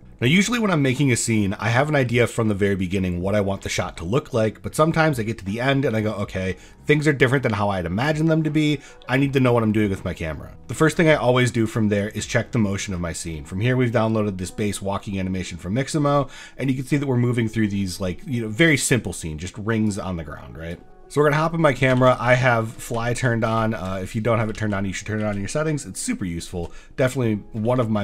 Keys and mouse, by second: 10.5 click, 11.7 click, 16.6-17.2 drag, 17.8 drag, 18.6-19.4 drag, 19.9 click, 20.7 drag, 22.0-25.2 typing, 26.5 shift+w, 27.6-28.0 typing.